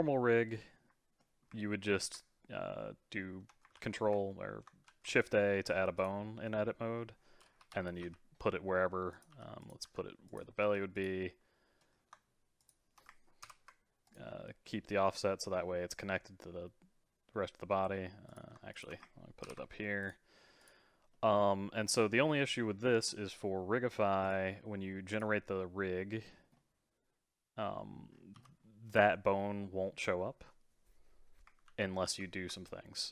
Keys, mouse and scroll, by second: 0.5-3.7 ctrl+middle drag, 3.7 ctrl+a, 4.3 middle click, 4.9 shift+a, 5.3 middle click, 6.0 click, 6.5-7.6 middle drag, 7.6 KP_3, 8.0 r, 9.3 g, 9.8 s, 10.6 r, 11.9-12.6 scroll up 1, 12.6 shift+click, 13.4 ctrl+p, 18.3 click, 18.7 shift+click, 19.4 ctrl+p, 20.6 click, 21.1-23.2 middle drag, 23.2-24.2 scroll down 1, 24.2 click, 25.1-26.3 drag, 26.3-26.6 scroll down 2, 26.6-28.4 middle drag, 28.1 scroll down 3, 28.4 g, 31.7 ctrl+z, 32.1 ctrl+z, 32.7-33.1 middle drag.